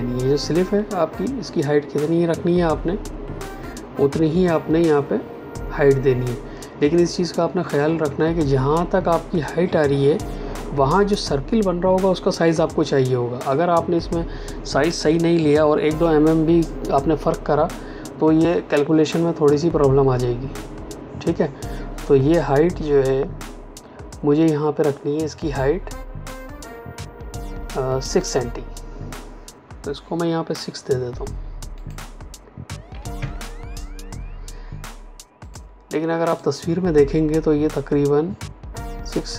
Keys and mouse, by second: 31.7 click, 32.8 KP_6, 33.1 KP_Enter, 35.4 click.